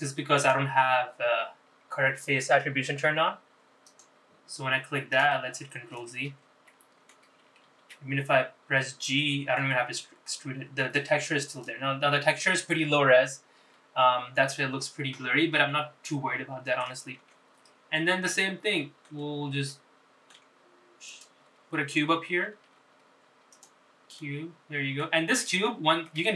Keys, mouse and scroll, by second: 2.0-6.3 drag, 7.2 ctrl+z, 7.8 middle click, 8.9 g, 14.4-15.1 scroll down 4, 15.2 middle click, 15.9-16.8 scroll up 2, 16.8-18.0 middle drag, 18.5 Tab, 18.8 scroll down 2, 19.8 middle click, 20.8 middle click, 22.2 shift+right click, 23.7 shift+a, 25.3 middle click.